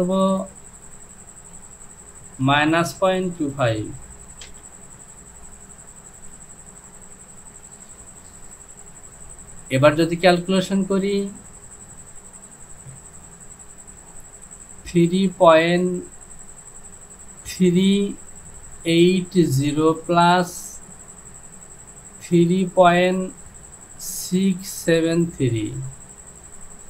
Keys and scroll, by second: 0.1 Down, 2.5 KP_Subtract, 3.0 KP_Decimal, 3.4 KP_2, 3.7 KP_5, 4.5 Return.